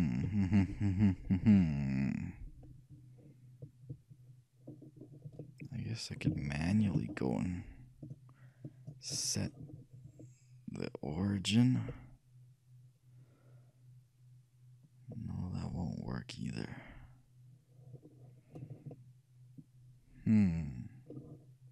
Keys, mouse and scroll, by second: 0.3 KP_1, 4.8 middle click, 5.5-6.5 middle drag, 8.1-9.9 shift+drag, 11.7-14.0 middle drag, 14.2 middle click, 18.7-19.0 scroll up 1, 19.0-20.8 middle drag.